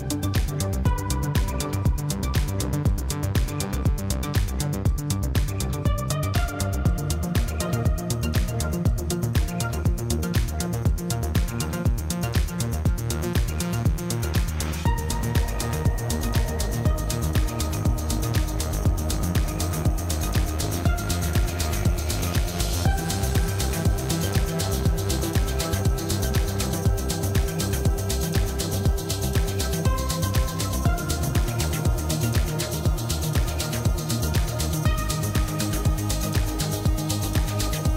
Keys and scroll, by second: 0.1 3, 2.2 i, 8.3 2, 12.2 ctrl+b, 18.1 Tab, 23.2 Tab, 35.0 ctrl+r.